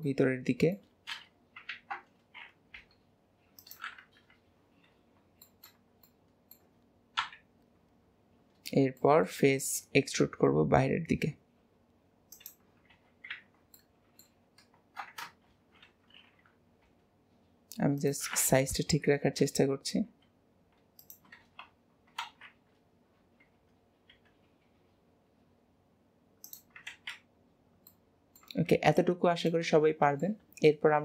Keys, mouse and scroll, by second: 0.2-1.8 middle drag, 1.8 ctrl+z, 2.9 i, 4.2 KP_1, 5.0-5.5 scroll up 1, 5.5-7.3 shift+middle drag, 7.3 KP_1, 8.2-9.1 scroll down 4, 9.1 shift+middle click, 9.6 e, 13.4 ctrl+z, 13.8-15.6 middle drag, 15.6 ctrl+y, 19.5-20.1 scroll up 1, 20.1 s, 22.3 alt+z, 24.2 e, 27.3-27.8 scroll down 3, 28.0 middle click, 28.6 Tab, 29.0-29.6 scroll down 2, 29.6-31.0 middle drag.